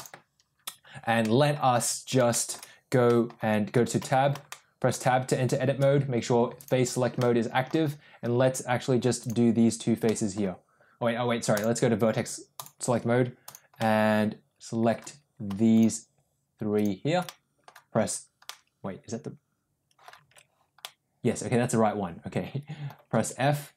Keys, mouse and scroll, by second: 0.0 click, 1.1 middle click, 2.2 shift+middle click, 3.0 middle click, 3.9 Tab, 4.4 middle click, 6.5 click, 7.1 middle click, 9.1 click, 10.0 middle click, 11.5 click, 12.4 click, 13.3 click, 13.8-14.9 middle drag, 16.6 shift+click, 17.3 middle click, 18.0 f, 18.5-20.1 middle drag, 20.2 ctrl+z, 20.8-22.9 middle drag, 23.2 f.